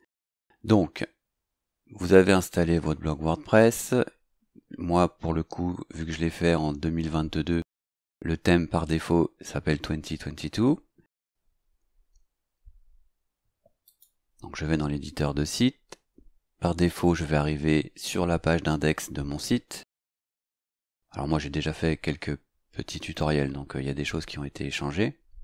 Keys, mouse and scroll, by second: 13.9 click.